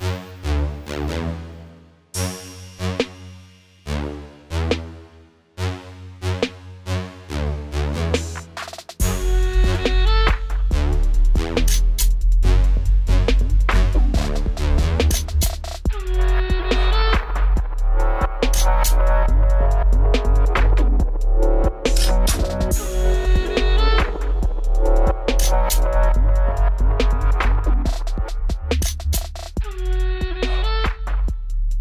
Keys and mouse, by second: 2.0 click, 5.5 middle click, 6.4-7.9 middle drag, 8.6 w, 10.1 w, 10.9 middle click, 11.2 click, 11.8 w, 13.2 right click, 13.6 w, 15.1 right click, 15.6 w, 17.0 right click, 17.3 w, 18.0 middle click, 18.1 middle click, 19.2 ctrl+z, 20.4 w, 21.0 middle click, 22.5 right click, 22.8 w, 23.4 w, 24.5 w, 25.4 w, 26.8-27.8 middle drag, 27.8-28.3 right drag, 27.8 w, 28.3 w, 29.0 w, 29.9 w, 30.9 middle click.